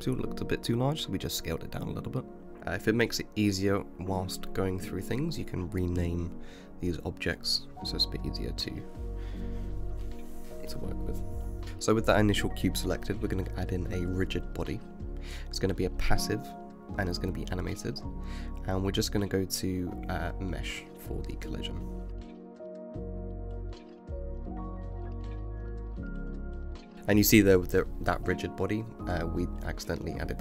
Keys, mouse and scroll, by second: 1.1-2.4 shift+middle drag, 2.4 g, 2.5 l, 6.2 click, 6.7-9.4 right drag, 9.4-11.6 middle drag, 12.3 click, 13.9-18.5 drag, 18.7 click, 20.2-23.2 drag, 23.5 space, 25.9 space, 27.3 click, 30.0 click.